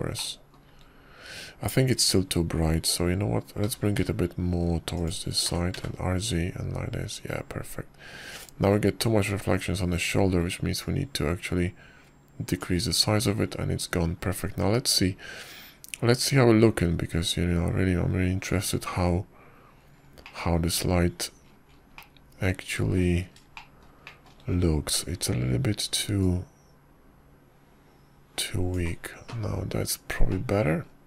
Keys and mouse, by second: 2.0 shift+drag, 5.5 g, 7.3 r, 12.7-14.5 drag, 22.1-23.1 middle drag, 23.8-24.8 middle drag, 25.4 shift+middle click, 25.9 shift+middle drag, 28.1-30.6 drag.